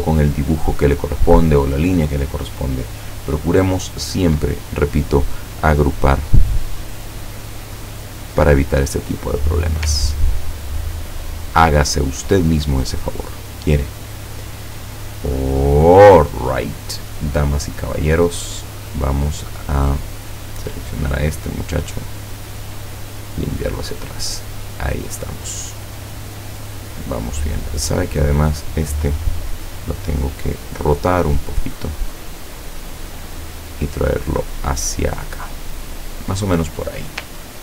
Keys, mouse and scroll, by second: 5.1 click, 5.7-9.3 drag, 10.4 ctrl+scroll down 2, 11.8 ctrl+scroll down 2, 13.8-15.9 drag, 17.3 scroll up 2, 17.9 scroll up 2, 19.8 click, 19.8 scroll up 2, 20.4 click, 20.8 click, 22.2 click, 23.8 click, 24.7 click, 27.8 click, 28.5 click, 29.6 click, 31.4 click, 36.6-37.0 scroll down 2.